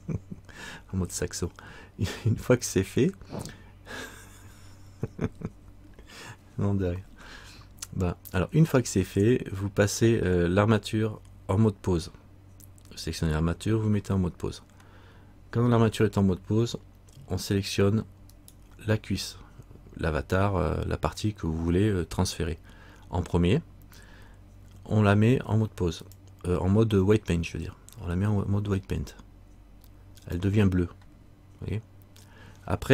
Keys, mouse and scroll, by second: 18.5 right click, 26.2 click.